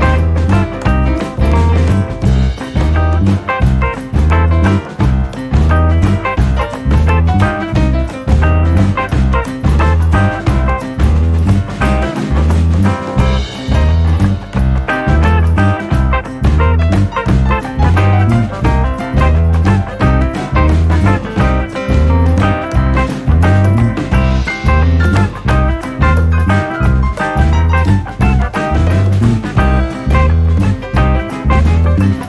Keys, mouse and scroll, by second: 0.1 r, 6.2-7.4 middle drag, 7.4-7.7 scroll down 1, 7.7 Tab, 8.5-10.0 scroll up 4, 10.0 ctrl+r, 13.5 ctrl+r, 15.9 a, 18.7-19.8 right drag, 20.7 shift+r, 21.9 shift+r, 22.9 shift+r, 23.9 shift+r, 24.9 shift+r, 26.4 shift+r, 30.2 shift+r, 30.9-31.7 scroll up 3, 31.7-32.2 scroll down 4.